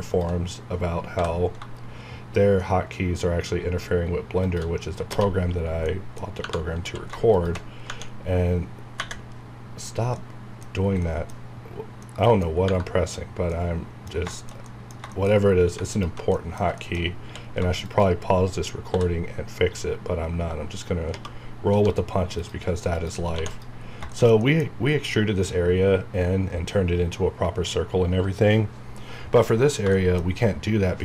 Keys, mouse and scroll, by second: 0.0 shift+click, 1.2 b, 4.4 shift+click, 5.5 scroll down 1, 5.9 middle click, 6.3 scroll up 1, 6.4 Tab, 6.8 q, 7.3 shift+click, 11.0 middle click, 12.5 scroll down 1, 13.5 middle click, 15.9 alt+click, 16.3 middle click, 16.8 middle click, 17.2 scroll up 1, 17.3 q, 17.8 shift+click, 18.9 b, 21.1 space, 21.7 3, 22.4 click, 23.3 2, 23.5 click, 23.8 scroll down 1, 24.1 shift+middle click, 29.9 shift+Num_Lock, 29.9 middle click, 30.3 scroll up 1.